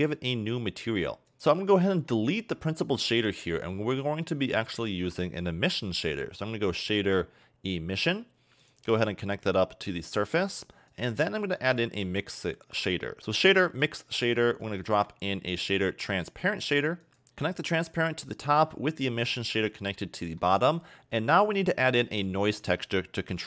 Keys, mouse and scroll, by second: 1.3 click, 1.3 middle click, 1.4-1.7 scroll up 3, 1.7 click, 3.2 x, 4.0 middle click, 4.8 shift+a, 9.5 click, 10.9 click, 11.8 shift+a, 14.8 shift+a, 17.3 click, 17.4 click, 19.0 click, 19.9 middle click, 20.7 scroll down 2, 21.5 click, 22.6 shift+middle click.